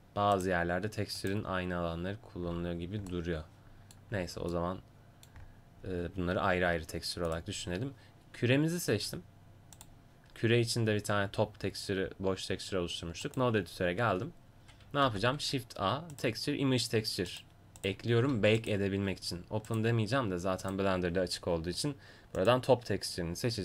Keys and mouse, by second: 15.1 shift+a, 19.8-23.6 drag.